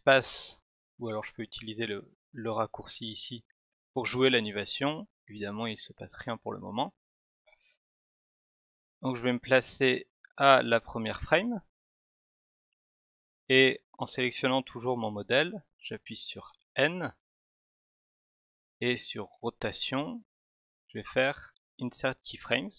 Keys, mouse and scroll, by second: 1.9 click, 3.2 click, 7.1 click, 8.7-10.6 drag, 16.5 n, 19.2 right click, 21.8 click.